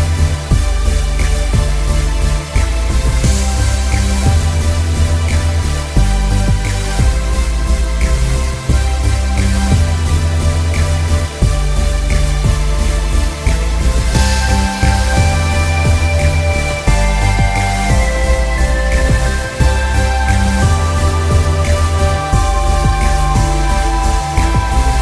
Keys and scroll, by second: 3.3 g, 6.2 ctrl+alt+z, 9.0 space, 9.5 space, 10.0 b, 13.8 ctrl+alt+z, 16.3 ctrl+alt+z, 18.2 ctrl+alt+z, 18.4 ctrl+alt+z, 24.5 space.